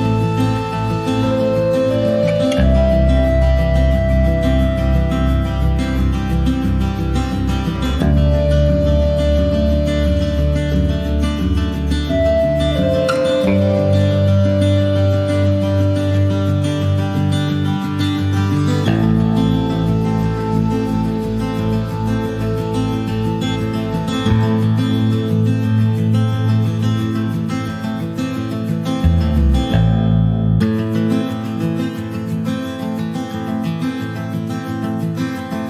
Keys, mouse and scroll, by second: 0.5 click, 1.1 scroll down 1, 1.3-2.9 middle drag, 2.9-5.2 drag, 5.2 ctrl+s, 5.6 middle click, 6.4 click, 7.4 click, 10.2 click, 11.3 click, 12.5 click, 13.2 click, 14.5-15.8 drag, 16.4 click, 17.3 click, 19.4 click, 20.8 click, 21.1 scroll down 2, 22.1-23.5 drag, 23.7 scroll down 2, 23.8 middle click, 24.0 scroll up 1, 24.4 scroll down 1, 24.6 middle click, 24.8 scroll up 1, 25.0 scroll down 2, 25.2-28.2 shift+middle drag, 28.2 alt+h, 28.6 scroll down 1, 28.8 middle click, 29.4-29.8 scroll up 4, 29.6 middle click, 30.0 shift+scroll down 1, 30.1 shift+middle click, 30.4-31.0 scroll up 1, 31.0 click, 31.8 middle click, 32.0-32.7 scroll up 2, 32.3 middle click, 32.7 middle click, 33.1 click, 34.1 click, 34.8 middle click, 34.9-35.4 scroll up 3, 35.4 middle click.